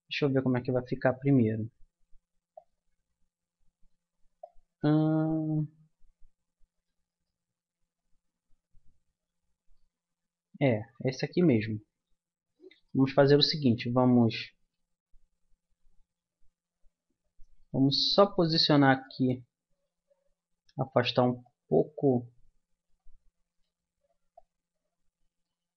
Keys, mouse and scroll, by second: 4.4-6.2 drag, 7.2-8.2 middle drag, 9.2-15.5 middle drag, 11.2 ctrl+z, 12.1 ctrl+z, 17.6-19.7 right drag, 18.9 click, 19.7 middle click, 20.7 click, 21.4 middle click, 21.7-23.2 drag, 23.5 right click, 24.3-25.3 middle drag.